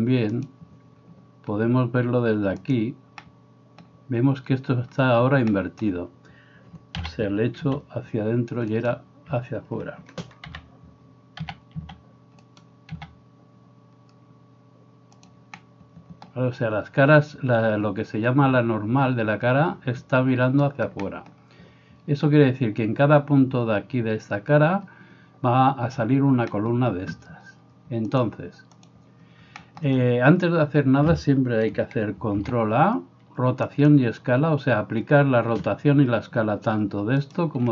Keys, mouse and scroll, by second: 0.4-15.3 drag, 7.0 s, 10.4 KP_7, 11.5 s, 13.0 s, 15.3-28.3 middle drag, 28.3-37.7 drag, 32.4 ctrl+a, 37.3 middle click, 37.3 right click.